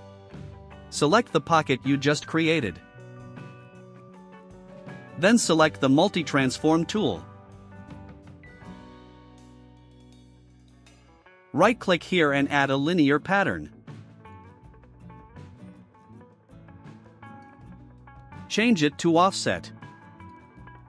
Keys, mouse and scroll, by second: 1.6 click, 9.5 click, 14.1 right click, 16.4 click, 18.9 scroll down 1.